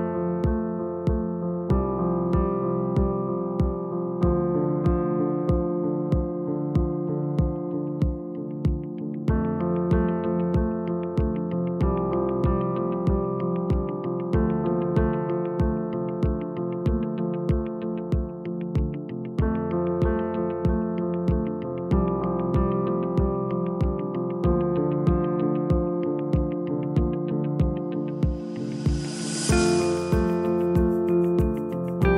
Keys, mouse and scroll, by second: 1.2 click, 3.5 g, 6.7 click, 8.6 click, 9.7 g, 26.5 s, 29.4 click, 30.8 s.